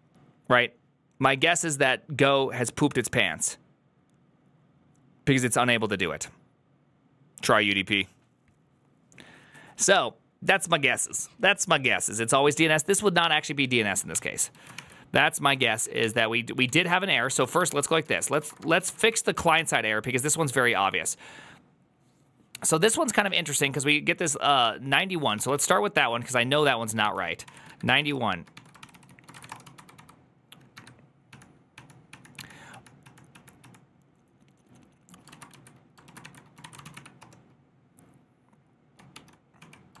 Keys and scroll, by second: 14.4 ctrl+c, 14.4 ctrl+a, 14.6 1, 15.4 ctrl+c, 15.7 ctrl+w, 15.9 h, 16.5 ctrl+w, 16.6 ctrl+o, 16.9-19.2 typing, 19.4 Return, 25.3 ctrl+c, 25.4 ctrl+c, 26.9 ctrl+n, 27.1-40.0 typing, 28.7 ctrl+c, 28.8 ctrl+c, 29.1 ctrl+c, 29.2 ctrl+:, 29.4 Return.